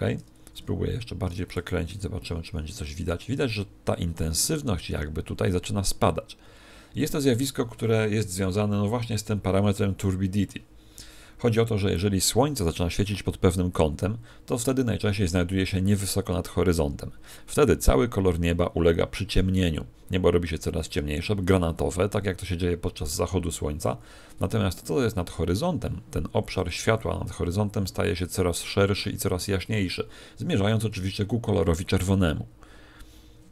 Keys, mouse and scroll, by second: 0.5 r, 1.6 click.